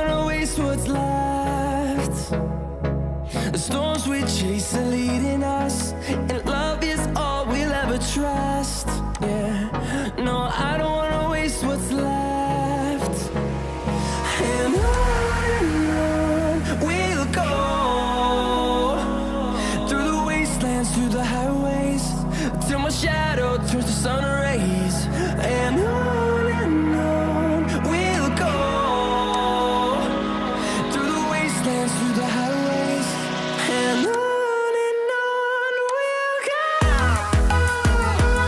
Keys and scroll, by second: 8.0 ctrl+t.